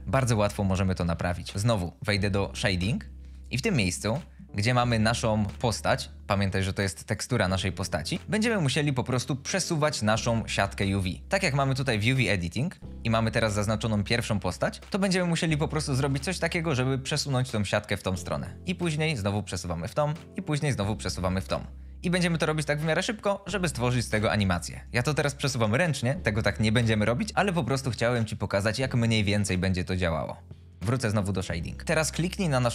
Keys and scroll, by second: 15.9 g, 16.3 x.